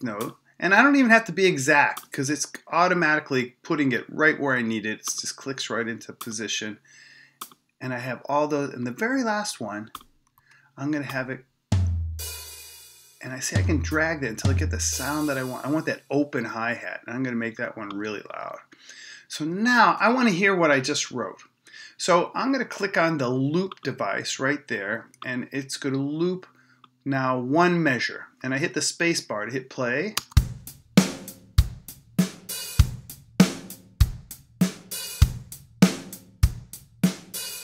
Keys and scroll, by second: 30.2 space.